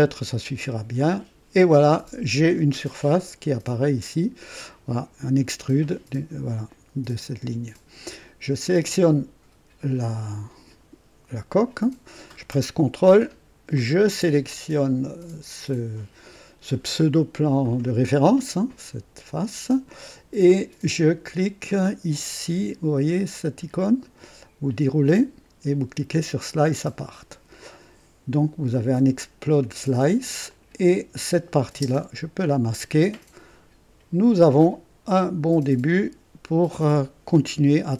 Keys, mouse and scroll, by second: 1.0 click, 8.7 click, 13.8 ctrl+click, 25.0 click, 26.4 click, 28.7 click, 30.5 click, 31.7 typing.